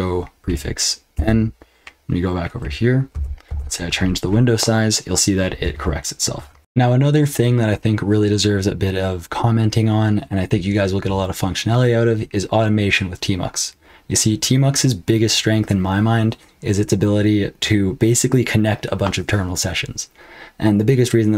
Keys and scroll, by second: 0.4 ctrl+b, 1.1 n, 3.4 super+f, 3.7 super+f, 6.6 super+h, 6.6 super+l, 6.6 F12.